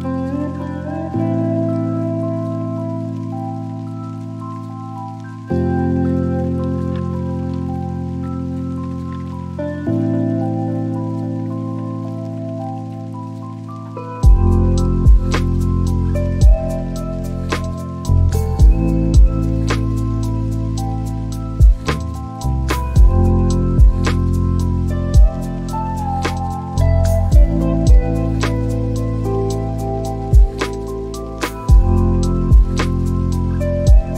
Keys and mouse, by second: 1.6 click, 3.0 click, 5.2 click, 6.4 click, 7.9 click, 9.9 n, 11.2 click, 14.7 shift+d, 17.4 click, 20.0 Delete, 22.0 shift+d.